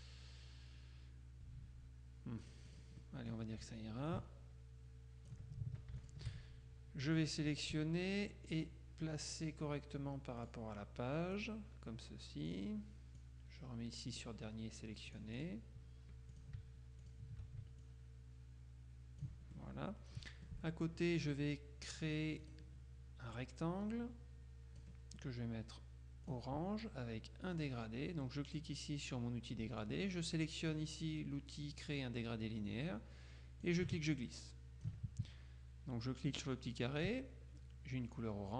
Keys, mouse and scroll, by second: 2.5 click, 4.2-5.9 ctrl+drag, 6.1 shift+click, 8.5 click, 9.4 click, 10.5 click, 11.4 click, 12.5 click, 13.3-14.7 drag, 15.2 click, 16.4 shift+click, 17.1 shift+click, 17.9-19.8 ctrl+shift+drag, 22.5 click, 23.5-25.4 drag, 26.4 click, 27.7 click, 33.7-35.5 ctrl+drag, 36.5 click.